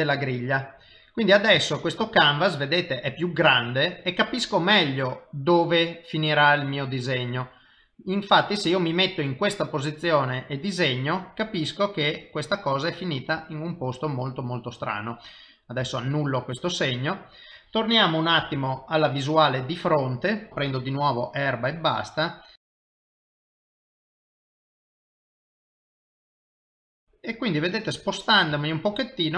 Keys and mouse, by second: 0.2 click, 0.9 middle click, 1.7 ctrl+middle click, 2.1 middle click, 7.8 middle click, 10.0 click, 10.8 middle click, 15.8 ctrl+z, 16.5 middle click, 18.4 KP_1, 20.5 click, 21.6 click, 22.2 click, 22.6 click, 22.8 click, 22.8 click, 23.0 click, 23.3 click, 23.5 click, 24.0 click, 24.1 click, 24.4 middle click, 25.4 click, 25.6 click, 25.9 click, 26.0 middle click, 26.5 click, 26.6 click, 26.8 middle click, 29.0 shift+middle click.